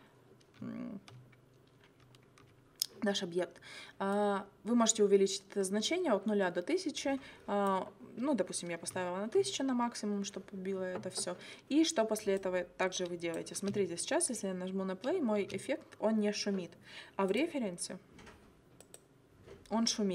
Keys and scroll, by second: 13.6 space, 15.4 space.